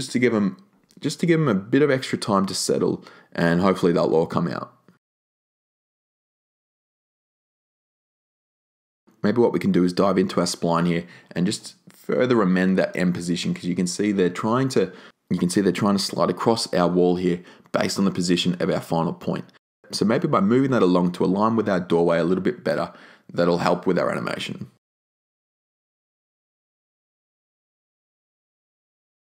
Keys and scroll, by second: 7.9 0, 21.6 r, 24.3 e.